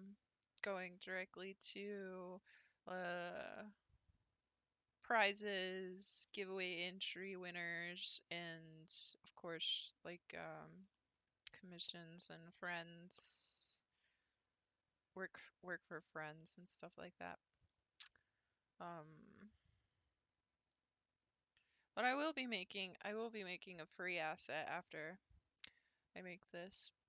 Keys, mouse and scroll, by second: 10.9-12.3 middle drag, 12.3-13.0 scroll down 10, 13.4-14.7 scroll up 18, 14.8-15.2 scroll down 10, 15.2-15.9 scroll up 9, 15.9-16.9 middle drag, 16.9-18.1 scroll down 3, 18.1-20.6 middle drag, 20.6-21.6 scroll down 5, 21.6-22.2 scroll up 4.